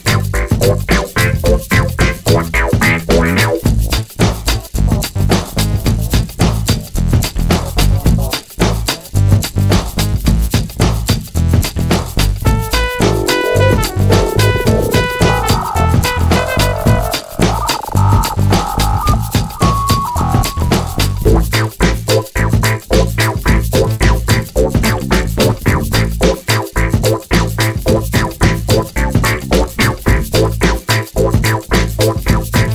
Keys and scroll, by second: 8.8 super+c, 9.0 super+v, 12.0 super+c, 12.2 super+v, 27.3 super+c, 27.6 super+v, 31.0 super+d.